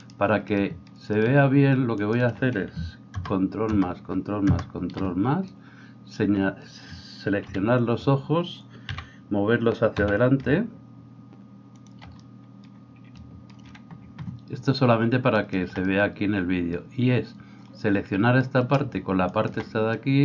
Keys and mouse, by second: 0.1-2.2 right drag, 2.2-15.4 shift+middle drag, 3.2 ctrl+KP_Add, 3.7 ctrl+KP_Add, 4.5 ctrl+KP_Add, 7.5 KP_3, 9.0 g, 15.4 alt+right click, 15.6-19.3 alt+middle drag, 19.3 alt+shift+right click, 19.5-20.2 alt+shift+middle drag.